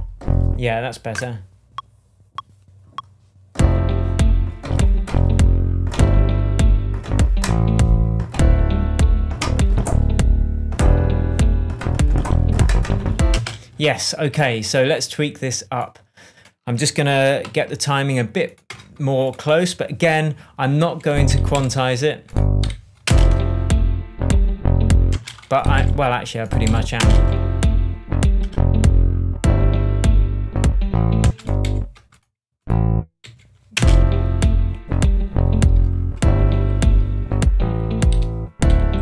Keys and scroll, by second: 13.3 space, 17.4 super+j, 18.7 BackSpace, 21.2 Right, 21.5 Left, 22.6 Right, 23.0 space, 25.1 space, 25.7 Left, 26.9 space, 31.2 space, 31.6 Left, 33.2 Left, 33.7 space, 38.1 Right.